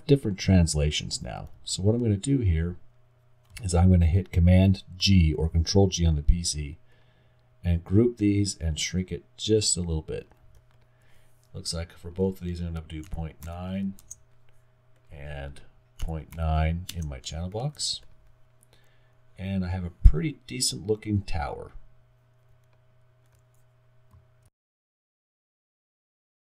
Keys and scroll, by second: 1.6 super+z, 5.0 super+g, 14.0 Return, 16.9 Return, 17.7-18.5 typing.